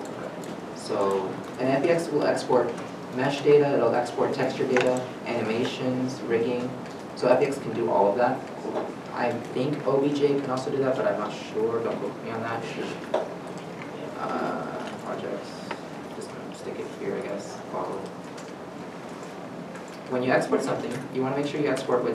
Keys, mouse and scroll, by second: 17.9-18.4 typing, 18.4 Return.